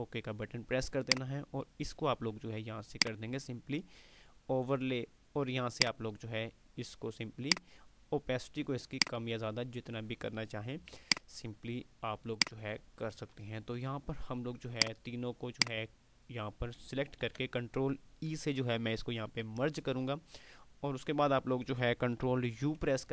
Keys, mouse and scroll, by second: 5.7-8.1 drag, 11.7 alt+space, 12.5 alt+click, 12.7-13.3 alt+space, 13.5 click, 17.4 ctrl+e, 21.9 ctrl+e, 22.4 ctrl+u.